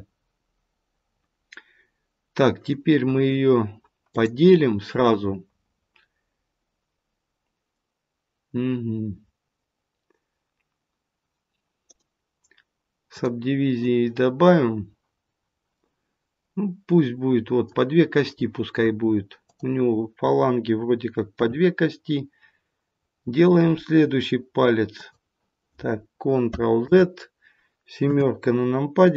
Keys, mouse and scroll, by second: 4.0 click, 11.8 right click, 15.7 middle click, 19.3 click, 21.3 e, 26.8 ctrl+z, 28.0 KP_7.